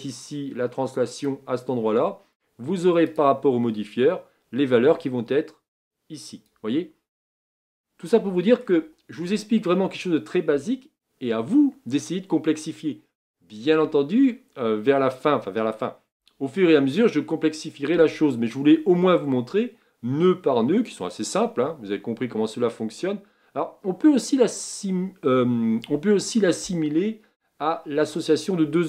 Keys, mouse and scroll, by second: 5.8-28.8 drag.